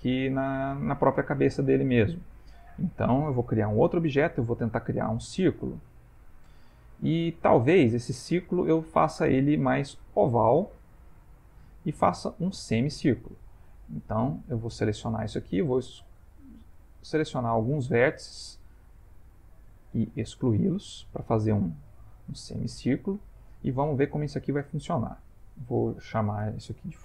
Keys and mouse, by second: 0.4 middle click, 2.1 middle click, 3.6 shift+a, 6.9 ctrl+middle click, 8.2 middle click, 11.1 click, 12.9 shift+middle click, 13.1 shift+middle click, 13.6 ctrl+middle click, 13.7 ctrl+middle click, 14.1 Tab, 17.1 click, 19.7 x, 22.8 Tab, 26.1 F2.